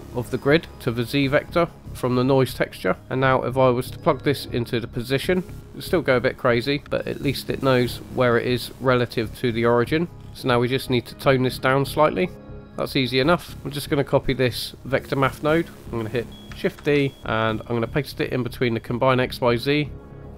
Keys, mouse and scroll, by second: 2.8 drag, 4.2 drag, 7.0 shift+middle click, 9.0 scroll down 2, 10.3 click, 10.3 scroll down 1, 12.2 click, 13.5 click, 13.7-14.1 scroll up 2, 14.5 click, 16.8 shift+d, 20.0 click.